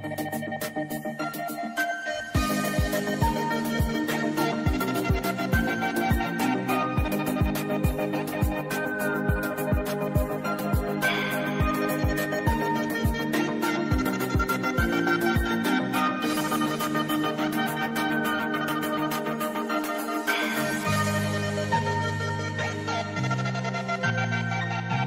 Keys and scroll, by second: 17.2 v.